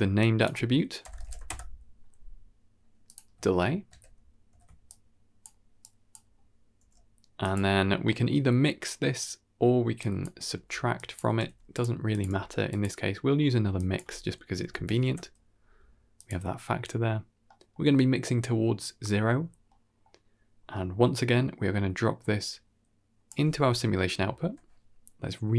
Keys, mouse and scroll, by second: 0.1-3.0 drag, 3.7 ctrl+c, 4.4 ctrl+v, 4.7-5.3 drag, 5.7 drag, 6.7 g, 7.7 scroll down 1, 7.9 middle click, 9.9 drag, 10.4 g, 11.4 g, 12.0 click, 12.2 g, 13.2-13.8 scroll up 2, 13.6-16.1 drag, 17.3-17.7 middle drag, 19.3-19.9 scroll down 3, 19.6 middle click, 20.4-21.0 scroll down 2, 20.6 middle click, 21.0-22.3 scroll up 1, 22.3 click, 24.3 n.